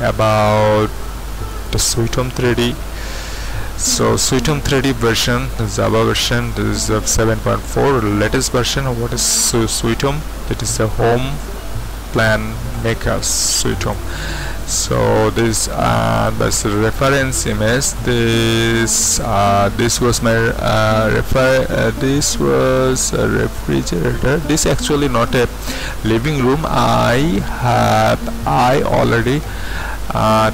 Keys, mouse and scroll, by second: 1.5 click, 13.8-15.9 drag, 16.1 click, 16.9-17.8 scroll down 1, 17.8-21.4 scroll up 1, 22.1-26.3 middle drag, 26.3-26.9 scroll up 1, 27.6-29.4 middle drag.